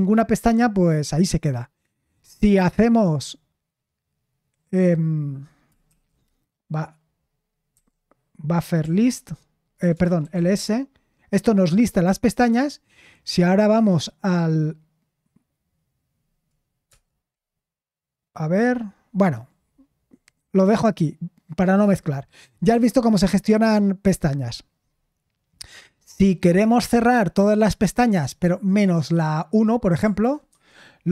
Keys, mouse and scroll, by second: 9.9-10.8 typing, 30.1-31.0 typing.